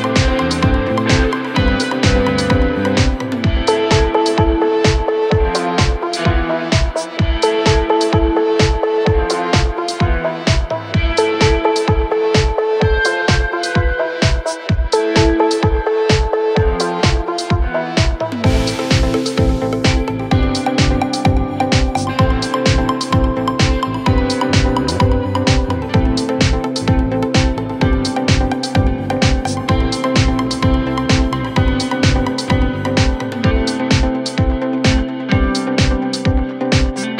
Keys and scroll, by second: 3.1 Delete, 3.6 2, 11.4 f, 13.7 f, 15.2 f, 19.4 f, 20.2 f, 26.2 f, 28.9 f, 32.2 f, 35.7 f, 36.6 f.